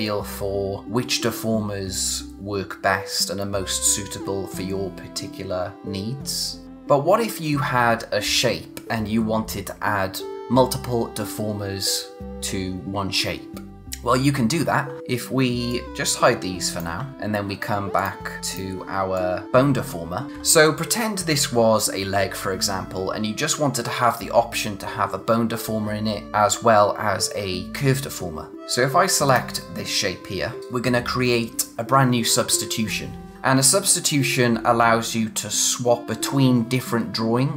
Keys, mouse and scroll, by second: 6.6 click, 15.1-15.4 scroll down 1, 15.7 click, 17.0 d, 17.3-17.9 scroll up 1, 17.9 click, 19.0 space, 19.1 click, 19.4 scroll down 1, 19.7 scroll, 19.8-20.3 scroll up 1, 29.2 click, 33.3 click.